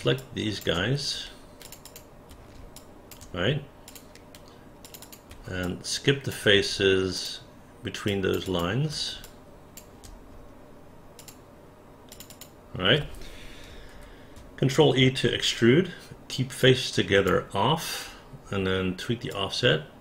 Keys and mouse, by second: 0.2 alt+click, 1.6 shift+click, 1.8 shift+click, 2.8 alt+click, 3.8 shift+click, 4.8 shift+click, 5.0 shift+click, 5.6 alt+click, 7.1 shift+click, 8.0 shift+click, 8.5 shift+click, 9.2 alt+click, 11.2 shift+click, 12.1 shift+click, 12.3 shift+click, 13.9 ctrl+e, 16.6 click, 19.3-20.0 drag.